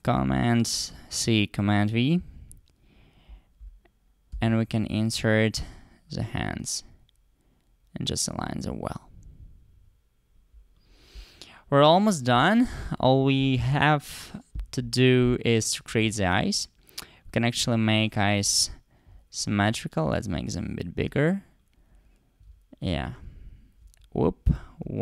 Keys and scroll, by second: 4.3 super+v.